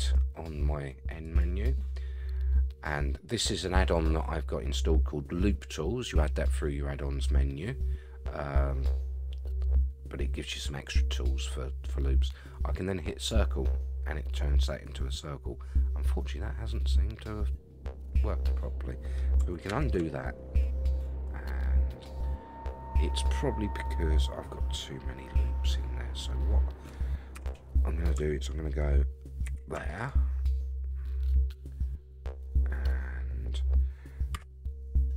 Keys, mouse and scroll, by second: 1.2 click, 13.2 click, 14.3-19.2 middle drag, 19.7 ctrl+z, 20.2-27.0 middle drag, 27.4 a, 29.4 ctrl+r, 30.4-33.6 middle drag, 34.3 3.